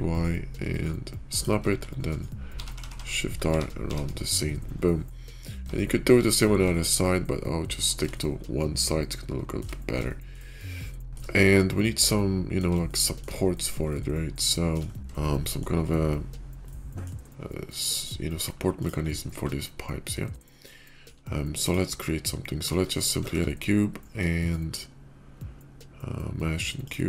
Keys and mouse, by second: 2.3-3.7 typing, 5.0-5.4 drag, 5.6-6.0 shift+drag, 6.6-7.6 shift+middle drag, 8.0-9.5 shift+middle drag, 10.0 shift+middle drag, 10.8-11.1 shift+middle drag, 11.9-12.5 middle drag, 12.7-13.1 shift+middle drag, 13.8-14.7 shift+middle drag, 15.1-15.5 shift+middle drag, 16.6-17.0 middle drag, 20.3-21.0 shift+middle drag, 21.4 middle click, 23.0 shift+a.